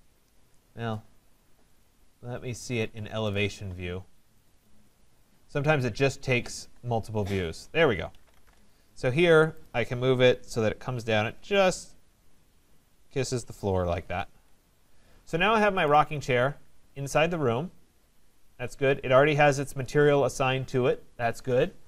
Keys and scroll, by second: 0.3 Escape, 8.4 Return, 14.3 Escape.